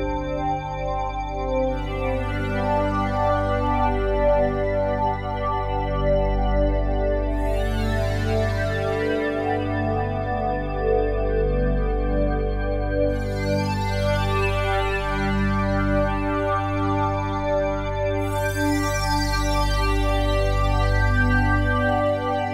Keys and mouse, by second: 0.5 ctrl+s, 1.7 click, 3.2 click, 4.1 click, 6.6 click, 8.4 n, 9.5 click, 9.9-12.8 drag, 13.6 ctrl+s, 14.3-15.9 drag, 17.9-19.5 drag, 19.5-19.9 typing.